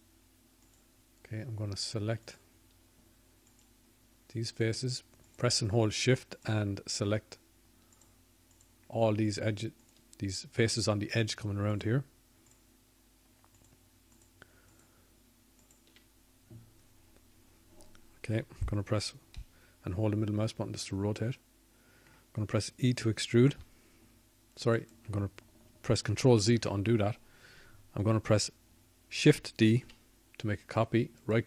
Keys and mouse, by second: 6.8-11.6 drag, 14.2 shift+click, 14.8 shift+click, 29.7 e.